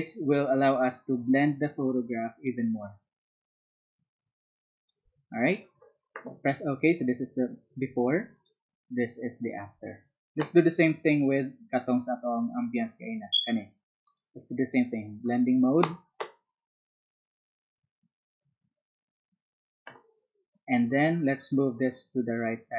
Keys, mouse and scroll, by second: 0.3-4.8 alt+drag, 5.5 alt+click, 8.3 alt+click, 11.1 alt+click, 13.3 alt+click, 14.0 alt+right click, 21.7-22.7 alt+drag.